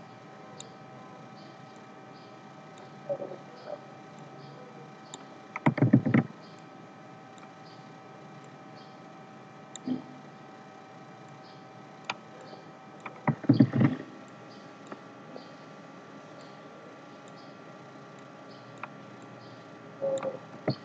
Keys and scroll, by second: 5.8 ctrl+c, 6.1 ctrl+f, 13.5 ctrl+c, 13.7 ctrl+f.